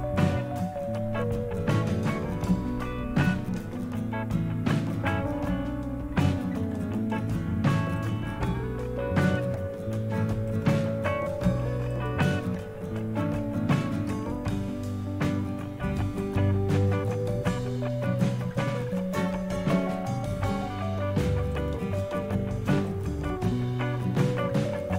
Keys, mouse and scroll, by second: 0.0 click, 4.7 click, 6.8 click, 7.9 click, 10.4 click, 11.9 click, 16.2 click, 18.5 click, 21.5 click, 22.8 click.